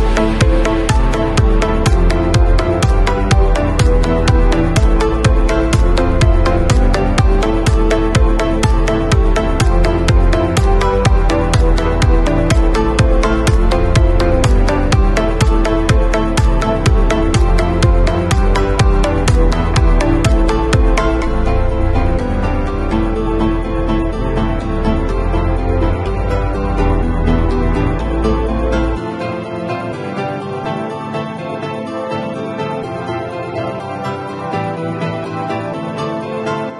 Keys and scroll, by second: 8.1 Down, 12.2 super+u, 27.9 b, 30.5-31.3 typing.